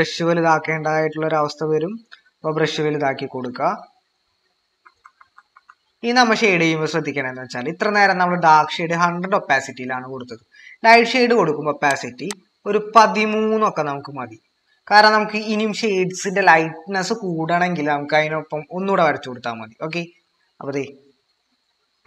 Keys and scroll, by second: 4.9 typing.